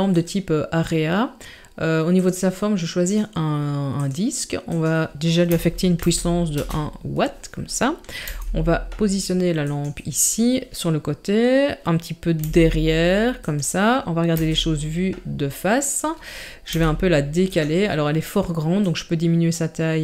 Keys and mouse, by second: 2.2 click, 3.1-4.1 drag, 4.7-6.6 drag, 8.3 g, 12.4 g, 14.4 KP_1, 16.7 g, 18.8-20.0 drag.